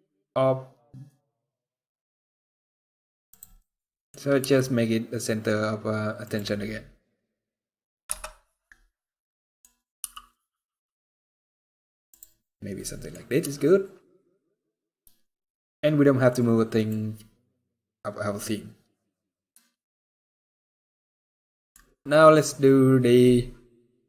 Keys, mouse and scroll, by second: 3.3 middle click, 4.1 g, 6.7 middle click, 7.7 KP_0, 8.9 middle click, 9.7 g, 12.5 middle click, 13.0 scroll up 1, 13.1 g, 17.3 scroll up 5, 18.3 scroll down 3, 19.4 scroll down 1, 20.6 scroll down 1, 21.3 middle click, 21.3 scroll down 1, 21.9-22.6 scroll down 1.